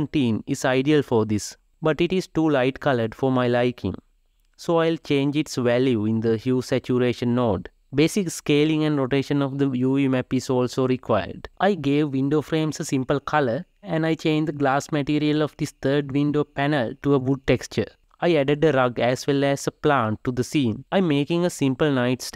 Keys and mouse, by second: 6.8-9.1 drag, 9.1-10.2 shift+middle drag, 10.2 click, 11.1 click, 12.4 click, 13.4 click, 16.2 o, 17.3 g, 18.4 shift+click, 18.5 shift+click, 19.8 ctrl+p, 20.0 ctrl+middle click, 22.2 g.